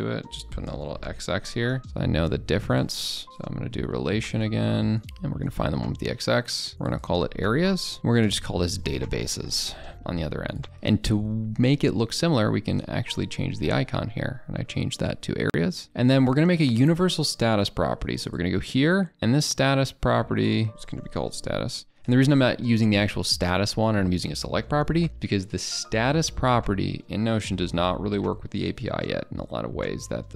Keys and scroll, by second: 1.5 ctrl+[, 8.0 ctrl+[.